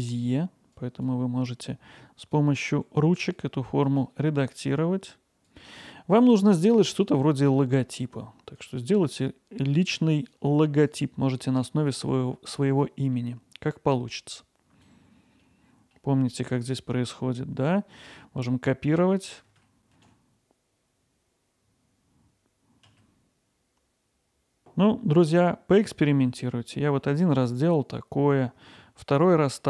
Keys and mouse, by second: 0.7 click, 2.2 click, 2.7 g, 3.3-4.6 drag, 4.6 g, 5.5 click, 6.8 click, 8.6-10.5 drag, 10.5 g, 11.5 click, 12.1 g, 12.7 click, 14.5 click, 15.4 middle click, 19.5 d, 20.7 s, 21.5 click, 21.8 alt+middle click, 22.0 middle click, 22.3 click, 22.9 alt+middle click, 23.3 click, 23.4 g, 23.9 click, 24.2 middle click, 26.9 middle click, 27.2 middle click, 28.3 middle click, 28.6 middle click, 29.3 middle drag.